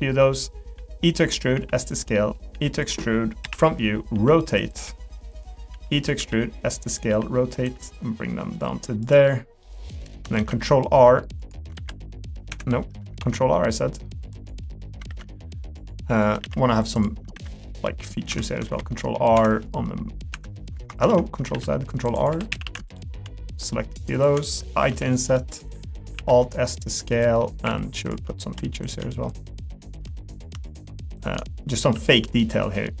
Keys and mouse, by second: 0.7-7.6 typing, 2.1 middle click, 9.3 middle click, 10.0 middle click, 10.3 r, 13.2 r, 14.6 middle click, 20.3 Escape, 21.1 ctrl+z, 21.5 ctrl+r, 22.3 3, 22.5 a, 22.9 alt+click, 24.9 i, 26.1 alt+s, 27.4 middle click, 27.6 3, 30.3 click, 31.2 shift+click.